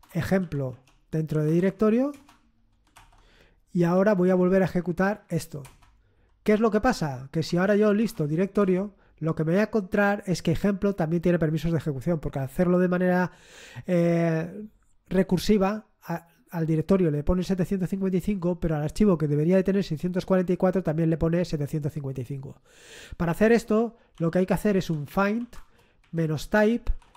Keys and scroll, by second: 0.0-8.5 typing, 8.5 Return, 24.1-27.1 typing.